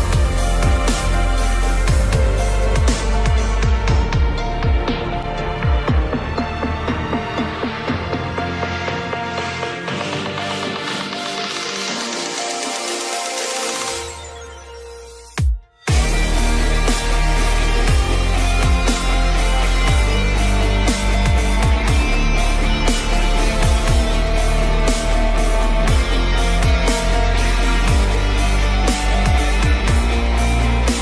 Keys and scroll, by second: 2.3 ctrl+alt+z.